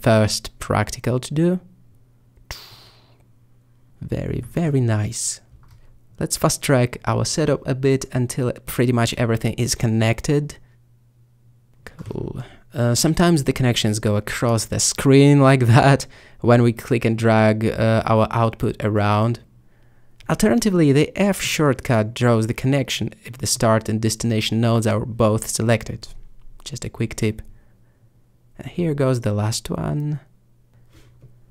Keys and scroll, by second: 5.7 5, 7.1 1, 10.4 alt+b, 12.4 п, 13.6 п.